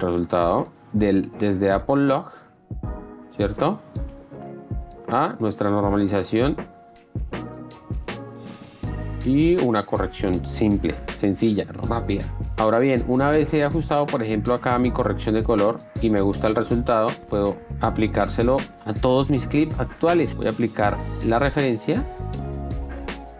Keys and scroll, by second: 11.0 d, 18.7 ctrl+a, 22.8 ctrl+a.